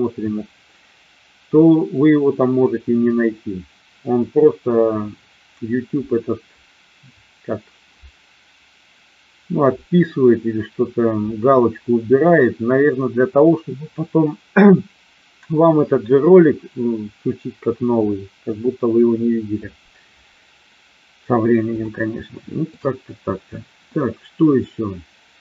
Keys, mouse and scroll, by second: 21.9-22.6 shift+middle drag.